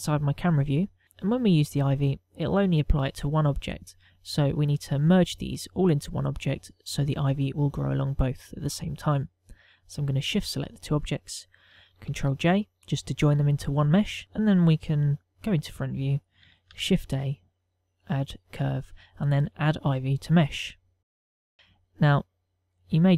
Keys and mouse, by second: 1.0 middle click, 1.4 shift+middle click, 1.6 shift+middle click, 11.0 shift+click, 12.7 ctrl+j, 16.0 KP_1, 17.4 shift+a.